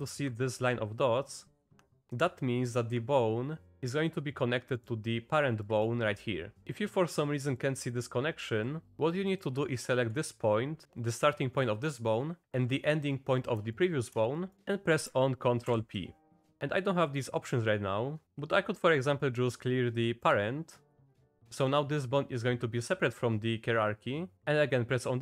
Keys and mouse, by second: 7.2 click, 8.0 click, 8.6 click, 9.3 click, 12.4 click, 13.7 shift+click, 14.5 click, 15.7 ctrl+p.